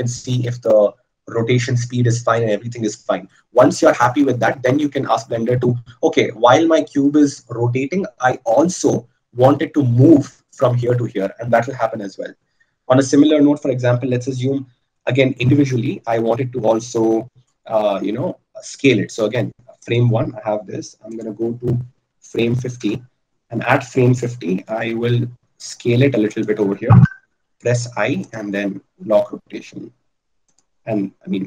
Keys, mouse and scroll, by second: 18.1 i, 21.6-23.8 drag, 25.3 s, 27.7 i, 31.3-31.4 drag.